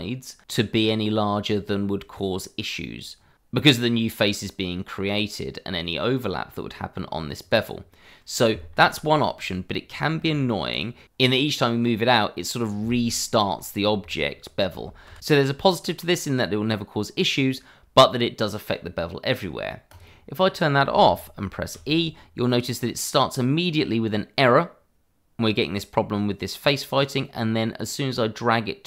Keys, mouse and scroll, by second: 7.4 click, 7.7-8.0 scroll down 1, 8.0 middle click, 8.7-9.2 scroll up 1, 9.2 middle click, 9.9 scroll down 1, 10.1 middle click, 10.7 click, 11.1 e, 14.0 click, 14.3 middle click, 15.0 ctrl+z, 18.0 shift+middle click, 20.0 click, 21.7 e.